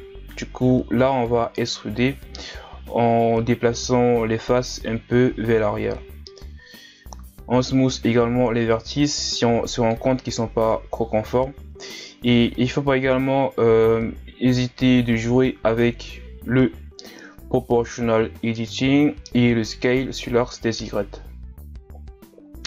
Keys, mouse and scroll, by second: 0.5 KP_1, 0.7 ctrl+scroll down 2, 0.9 click, 1.6 scroll down 1, 1.8 Tab, 2.4 scroll up 4, 2.6 Tab, 3.0-3.3 scroll down 1, 3.3 ctrl+Tab, 3.7 alt+right click, 3.9 ctrl+KP_Add, 4.0 ctrl+KP_Add, 4.2 ctrl+KP_Add, 4.5 ctrl+KP_Add, 5.1 ctrl+KP_Subtract, 5.4 middle click, 5.6 KP_3, 6.4-7.8 drag, 7.8 r, 8.7 s, 9.1 KP_1, 9.4 ctrl+scroll down 5, 9.6 click, 10.5 scroll down 2, 11.1 r, 11.8 click, 12.4 ctrl+scroll up 3, 12.8 r, 13.6 KP_3, 14.1 click, 14.8 middle click, 15.2 Tab, 15.4-16.2 middle drag, 16.2 shift+scroll down 3, 16.3-16.7 middle drag, 16.7 scroll up 1, 16.8 Tab, 17.1 middle click, 17.7 alt+right click, 17.8 middle click, 18.1 s, 18.8 shift+right click, 19.0 shift+right click, 19.1 middle click, 19.5 s, 20.1 middle click, 20.9 s, 21.4 KP_1, 21.6-22.0 scroll down 1, 22.0 scroll up 6, 22.1 middle click.